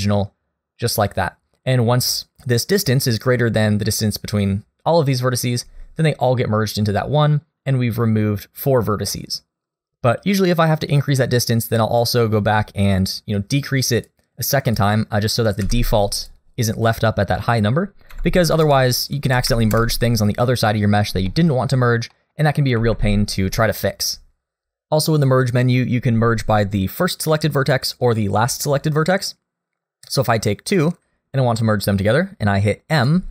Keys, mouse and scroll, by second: 12.0 click, 13.3-14.0 scroll down 2, 14.0 click, 14.7 click, 15.6 m, 17.4 click, 18.6 KP_0, 21.0 scroll down 1, 21.3 shift+middle click, 22.1 middle click, 22.8 alt+a, 23.1 scroll down 2, 23.6 shift+middle click, 30.7 shift+click, 32.9 m.